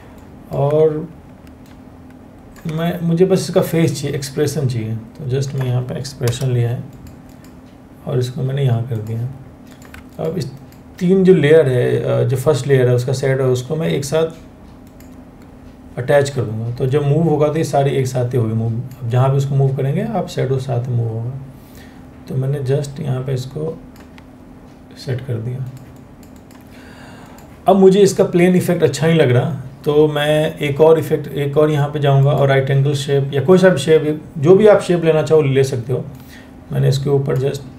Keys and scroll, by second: 5.8 Return.